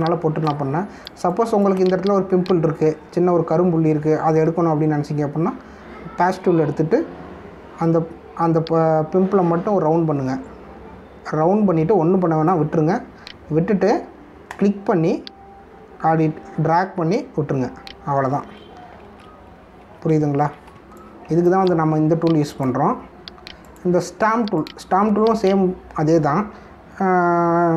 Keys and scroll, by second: 20.0 ctrl+z, 21.0 ctrl+alt+z, 21.7 space.